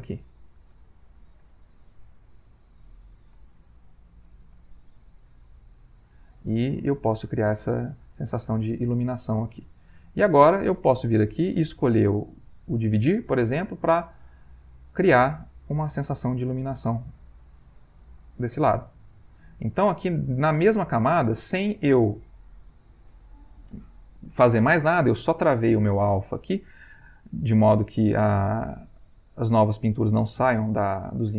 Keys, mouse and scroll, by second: 0.9 shift+click, 1.4-3.1 shift+drag, 3.4-4.6 shift+drag, 4.9 shift+click, 5.4-10.8 drag, 11.1-13.2 drag, 13.9 click, 14.6 click, 15.2 click, 15.7 click, 16.4 click, 17.5-22.8 shift+drag.